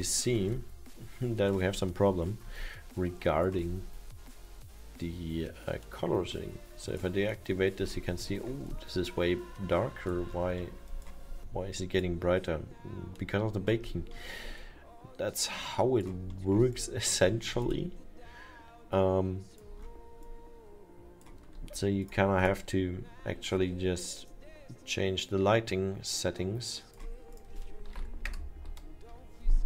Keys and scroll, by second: 0.2 alt+7, 27.7-28.5 typing.